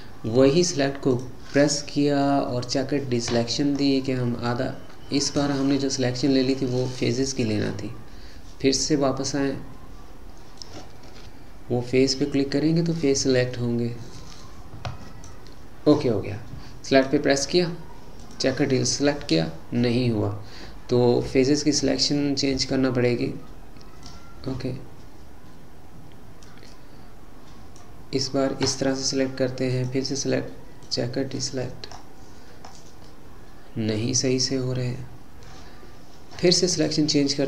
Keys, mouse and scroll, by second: 1.1-3.8 drag, 3.8-5.2 scroll up 5, 5.2-6.1 scroll down 4, 6.1-7.3 scroll down 1, 7.3 click, 10.6 click, 16.9-19.1 drag, 19.1-20.1 scroll up 6, 20.1-21.6 scroll down 6, 21.6-24.1 middle drag, 24.1 click, 29.7-31.9 drag, 31.9-32.4 scroll up 5, 32.7-33.1 scroll up 2, 33.1 middle click, 34.1-36.8 scroll down 8, 36.8 click.